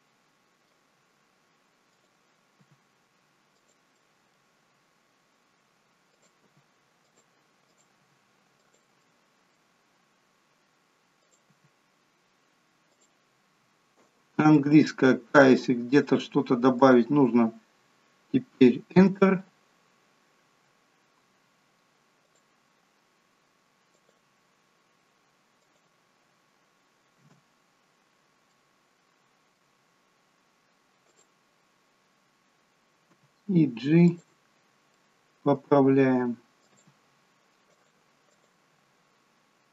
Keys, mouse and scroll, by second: 2.0 click, 2.6 g, 4.1 middle click, 4.6-5.6 scroll up 2, 6.1 click, 6.6 g, 7.8 click, 8.1 g, 9.1 middle click, 9.1-9.6 scroll up 1, 11.2 click, 11.6 g, 14.6 k, 21.3 k, 27.9-28.5 scroll up 2, 28.5 middle click, 31.2 click, 33.2 g, 35.0 middle click, 36.7 click, 36.8 g, 38.8 click, 38.8 g.